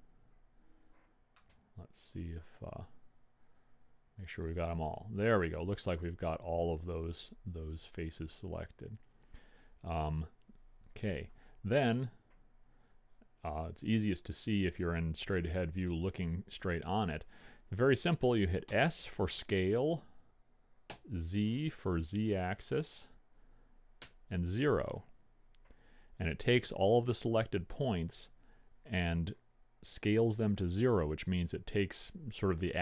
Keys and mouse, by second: 12.3 KP_1, 19.3 s.